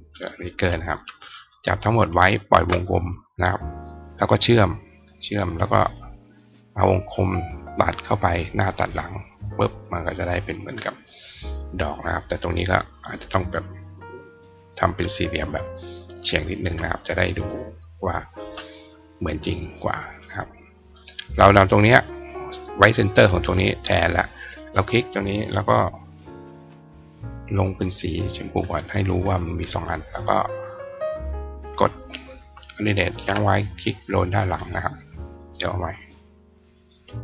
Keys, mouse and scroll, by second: 1.2 click, 4.7 click, 5.6 click, 6.0 click, 8.8 click, 9.3 click, 11.8 click, 16.3 right click, 17.7 click, 19.5 click, 20.1 click, 20.8 click, 22.0-23.2 drag, 23.5 click, 24.2 click, 28.3 click, 28.9 click, 29.7 click, 32.9 alt+click, 33.9 click, 36.1 click.